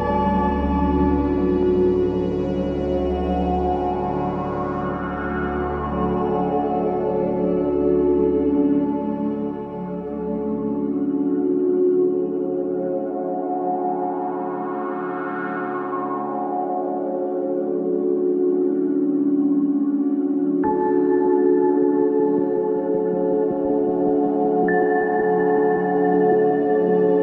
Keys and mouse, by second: 0.3 click, 1.4-4.4 drag, 5.5 ctrl+alt+click, 6.9 typing, 7.7-9.2 alt+shift+middle drag, 7.9-9.2 alt+shift+drag, 9.5 middle click, 9.6 click, 10.4-11.8 middle drag, 14.1 click, 15.2-15.6 typing, 15.9 Return, 19.3-20.8 drag, 21.0-21.8 drag, 22.1-24.1 alt+drag, 25.3-26.8 drag, 26.8-27.1 typing.